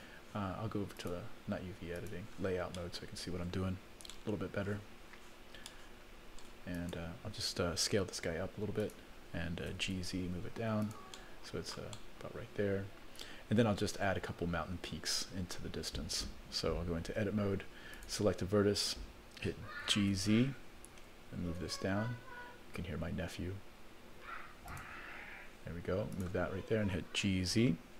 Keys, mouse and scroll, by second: 1.0 click, 2.0 click, 2.7 middle click, 4.6 shift+middle click, 5.7 shift+middle click, 6.7 click, 8.2 s, 9.7 g, 11.6 middle click, 11.9-14.1 middle drag, 17.1 Tab, 17.9 click, 19.9 g, 26.1 click, 27.2 g.